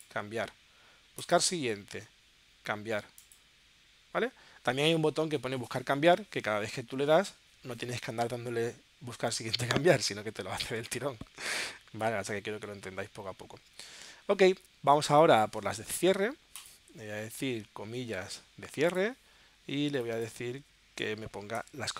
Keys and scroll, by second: 21.5 alt+shift+c.